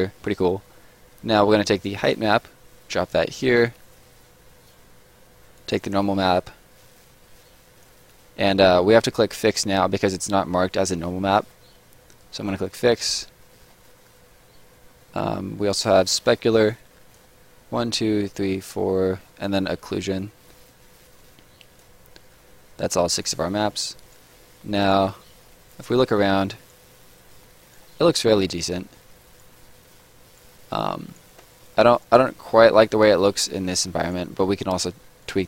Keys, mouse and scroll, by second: 0.1 middle click, 1.7 click, 5.5 click, 11.0 middle click, 12.6 click, 13.5 middle click, 15.7 click, 20.2 click, 22.9-23.5 scroll down 2, 23.0 right click, 23.5 middle click, 23.9 right click, 24.2 scroll down 1, 24.3 middle click, 24.7 right click, 25.1 middle click, 25.6 right click, 25.9 scroll down 1, 26.0 middle click, 26.5 right click, 26.8 middle click, 27.6 right click, 27.9 middle click, 28.6 scroll up 1, 28.8 middle click, 29.2 right click, 29.4 middle click, 30.2 right click, 30.5 middle click, 31.0 right click, 31.2 scroll down 1, 31.4 middle click, 31.8 right click, 32.2 middle click, 33.0 right click, 33.4 scroll down 1, 33.5 middle click, 33.8 scroll up 1, 34.0 right click, 34.7 click.